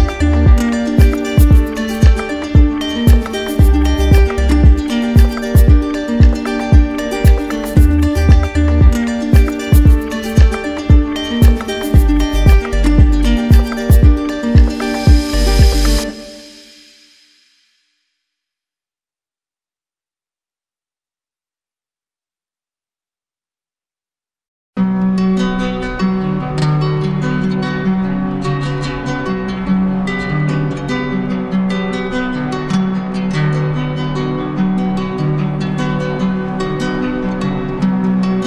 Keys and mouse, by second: 2.9-5.4 right drag, 5.4-7.5 alt+drag, 8.0-9.1 right drag, 10.6 right click, 12.1 alt+click, 12.7 alt+click, 13.4 shift+right click, 17.4 click, 17.8 q, 18.9 alt+click, 20.6 ctrl+click, 21.1 right click, 24.5-27.2 drag, 27.8-28.9 drag, 30.4 click, 31.4 alt+right click, 32.7 alt+right click, 33.4 alt+right click, 35.5 alt+right click, 37.9 right click.